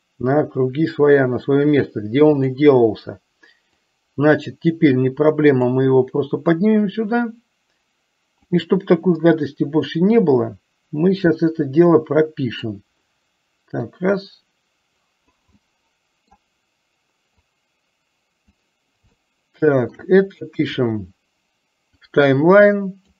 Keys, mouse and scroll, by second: 4.1-6.0 drag, 6.7-8.9 drag, 9.3-12.8 middle drag, 14.5-15.6 drag, 15.7 middle click, 17.7-18.9 drag, 19.3-20.4 shift+middle drag, 20.7 KP_1, 22.0-23.1 drag.